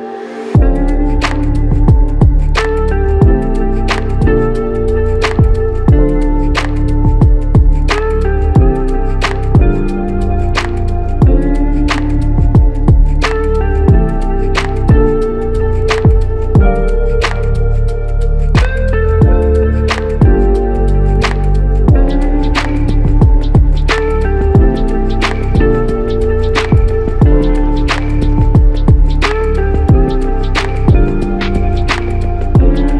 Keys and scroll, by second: 9.9 z.